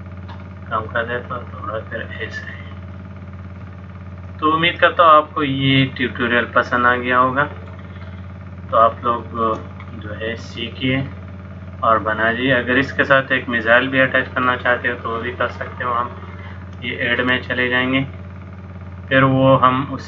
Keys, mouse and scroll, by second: 0.3 click, 3.0 middle click, 8.9 shift+middle click, 10.0 middle click, 17.2 click.